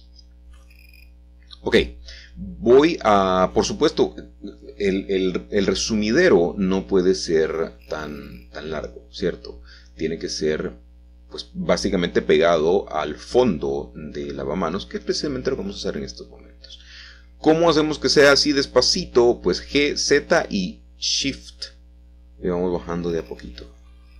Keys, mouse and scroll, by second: 0.7 g, 1.1 z, 2.6 Escape, 3.3 click, 5.3 Tab, 6.1-8.0 middle drag, 6.1 scroll up 1, 8.2-10.4 ctrl+middle drag, 9.3-10.6 typing, 12.1 alt+shift+click, 13.0 typing, 14.2 typing, 16.9 alt+shift+click, 18.3-18.8 typing, 22.6 click, 23.8 x.